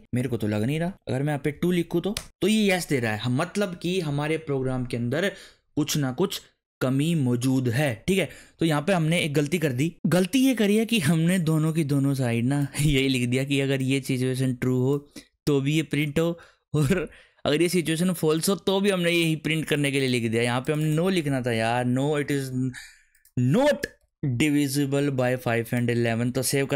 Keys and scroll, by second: 0.8 Up, 1.5 2, 2.1 Return, 21.3-22.2 typing, 23.7-24.7 typing, 26.0 ctrl+s.